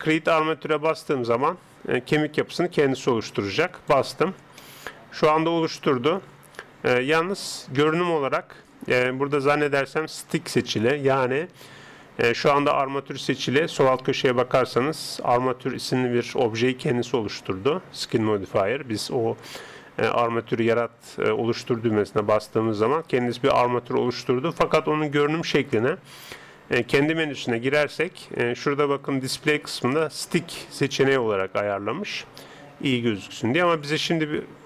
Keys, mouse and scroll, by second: 4.6-7.4 middle drag, 26.8 click.